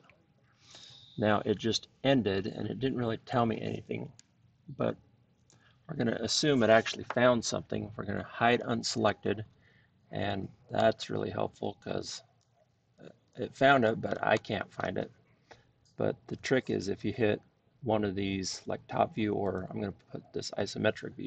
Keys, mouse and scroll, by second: 8.6 click, 9.0-12.3 drag, 14.0-14.7 scroll, 14.7-15.7 scroll, 17.3-19.0 scroll down 2, 19.5 click, 20.7-21.2 drag.